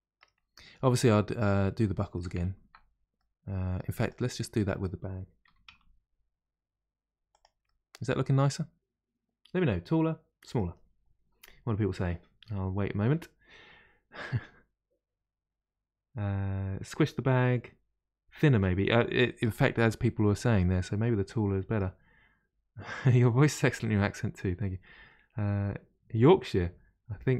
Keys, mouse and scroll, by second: 0.5-0.9 scroll down 1, 0.9-2.4 middle drag, 2.4 ctrl+z, 3.1 middle click, 3.9 click, 4.5 middle click, 5.4 s, 7.6-10.6 middle drag, 19.4-22.5 middle drag.